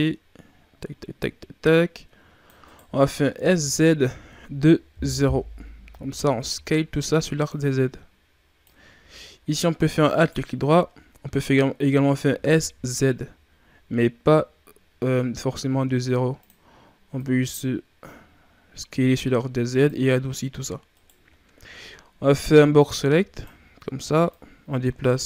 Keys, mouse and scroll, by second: 3.3 s, 6.6 shift+scroll up 5, 7.4-10.0 drag, 10.0 alt+right click, 10.9 shift+scroll down 2, 12.2 s, 17.1-20.1 drag, 20.8 right click, 21.3-22.2 ctrl+scroll down 1, 22.2 b, 24.2-25.2 drag.